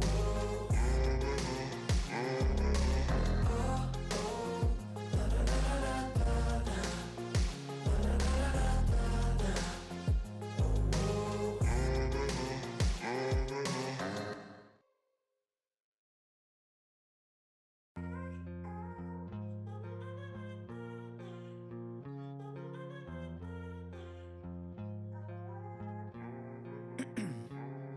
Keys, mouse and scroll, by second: 0.9 click, 2.1 8, 2.4 ctrl+s, 3.4 click, 4.8 click, 10.8 click, 15.2 click, 16.7 click, 18.2-20.3 typing, 21.0 click, 23.0-24.1 scroll down 1, 24.1 click, 27.0-27.9 typing.